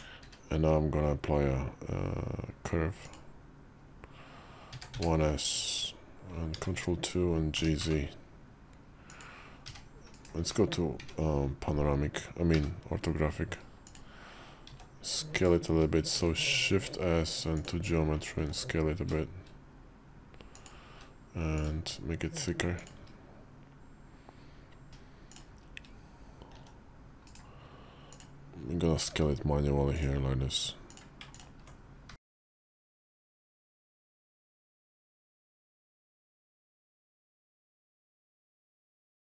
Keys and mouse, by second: 0.1 q, 6.4 ctrl+2, 7.4 g, 9.5 g, 10.3 `, 10.8 `, 12.4 g, 14.5 s, 16.0 shift+s, 18.2 s, 20.8 q, 24.9 shift+Tab, 26.5 s, 29.0 g, 30.8 click, 31.3 ctrl+click, 32.0 g, 34.5 click, 35.2 click, 37.4 g.